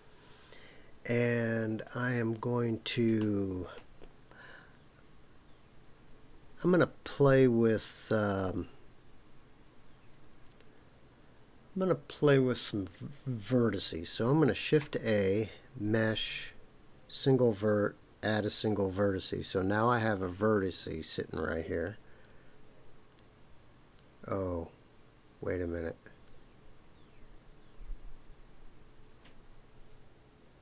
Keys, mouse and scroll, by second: 14.8 shift+a, 29.9 KP_Decimal.